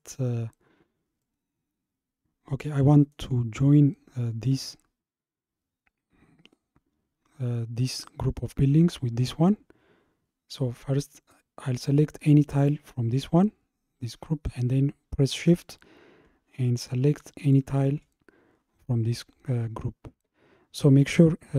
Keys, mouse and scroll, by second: 1.2-4.3 middle drag, 12.6 click, 17.5 shift+click.